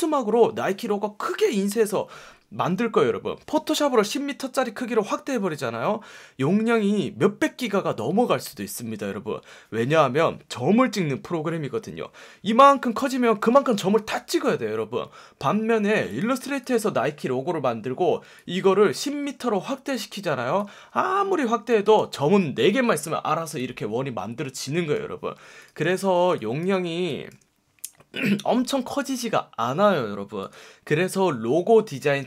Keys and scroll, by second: 15.9 space, 21.5 space, 26.1 space, 26.7 super+space.